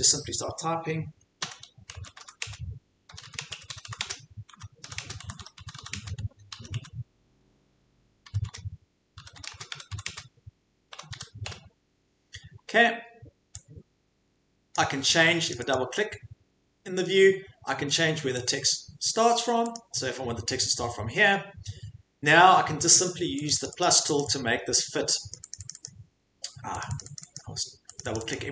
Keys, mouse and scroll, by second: 1.4-12.0 typing, 14.7 click, 15.5 click, 15.7 click, 18.4 click, 19.7 click, 23.5 click, 23.7 click, 23.8 click, 24.0 click, 24.2 click, 25.3 click, 25.5 click, 25.7 click, 25.8 click, 26.8 click, 26.9 click, 27.2 click, 27.3 click, 28.2 click, 28.3 click.